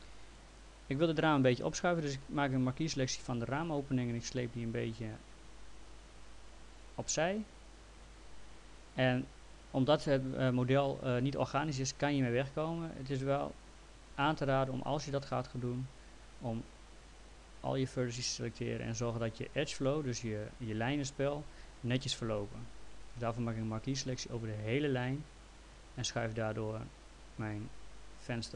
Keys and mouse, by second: 1.4 click, 4.4 click, 14.2 ctrl+z, 16.0 click, 18.6 click, 23.7 click, 25.7 click.